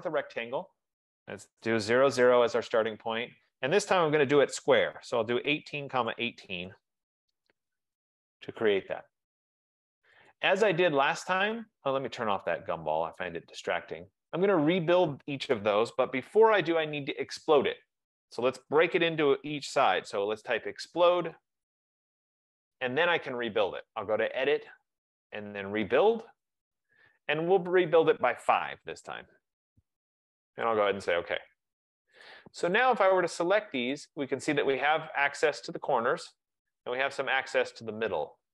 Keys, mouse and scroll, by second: 0.0 click, 1.6-2.1 typing, 2.4 Return, 3.1-5.1 drag, 4.4-7.3 typing, 7.1 Return, 8.6 middle click, 8.7 middle click, 10.4 click, 13.5 click, 20.2-20.5 typing, 21.2 Return, 23.5 typing, 24.9 click, 26.5 click, 28.2 click, 29.1 5, 29.3 Tab, 29.3 F15, 30.9 click, 32.4 click, 33.0 click, 34.0 click, 35.6 click.